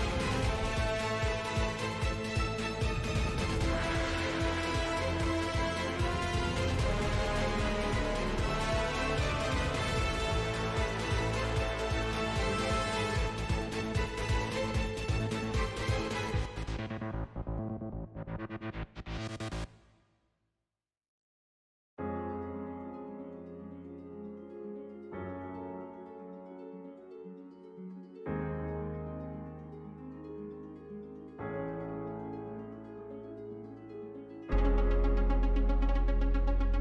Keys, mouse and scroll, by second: 0.3 a, 0.3 s, 0.9 r, 2.5 middle click, 2.7 scroll down 3, 2.8 middle click, 3.6 middle click, 3.9 r, 4.6 g, 4.9 scroll up 3, 5.0 shift+middle click, 5.4 s, 5.9 scroll up 2, 6.0 scroll down 2, 6.2-8.6 shift+middle drag, 8.6 g, 22.7 click, 24.8 a, 25.0 s, 26.5 r, 29.4 g, 31.8-33.5 middle drag, 33.5 g.